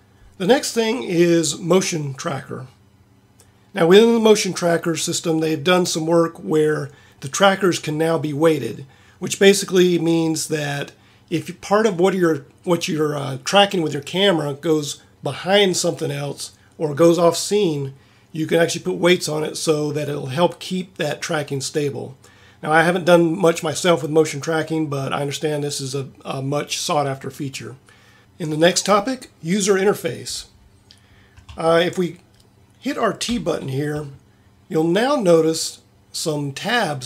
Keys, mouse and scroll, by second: 33.3 t.